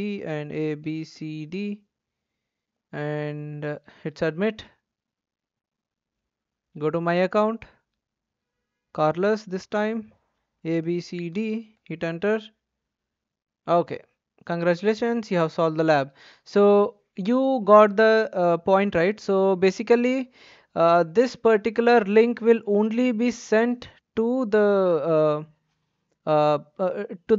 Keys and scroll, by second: 0.0-1.5 typing, 0.1 Tab, 10.5-11.3 typing, 11.7 Return.